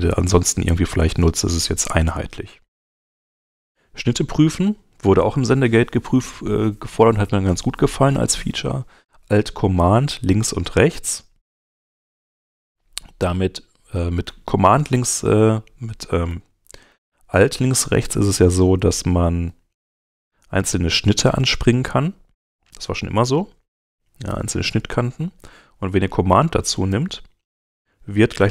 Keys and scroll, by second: 11.4 super+Tab, 14.2 super+Right, 14.9 super+Left, 16.0 alt+super+Left, 16.6 alt+Left, 16.9 alt+Right, 19.0 alt+Right, 19.4 alt+Left, 23.0 alt+Right, 24.6 alt+Left, 26.9 alt+super+Left.